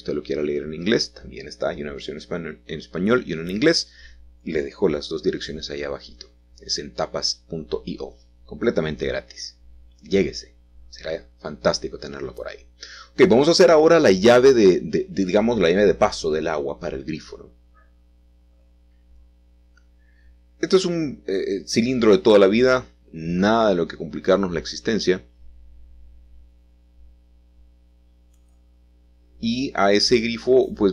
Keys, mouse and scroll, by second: 0.0-1.1 typing, 1.7 Return, 3.4 s, 5.4 click, 6.5 g, 10.7-11.8 drag, 13.2 g, 13.8 x, 17.0 click, 17.5 shift+middle click, 18.7-20.6 ctrl+middle drag, 21.6 g, 22.1 x, 25.0-27.4 shift+middle drag, 29.3 s, 30.6 click.